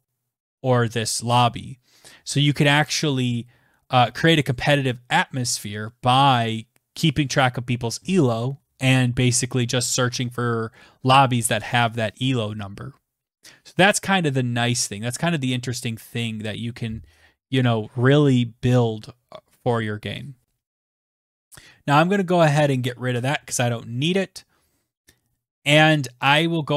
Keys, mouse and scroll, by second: 21.4 click, 21.4 BackSpace, 24.5 Return, 25.9-26.7 typing.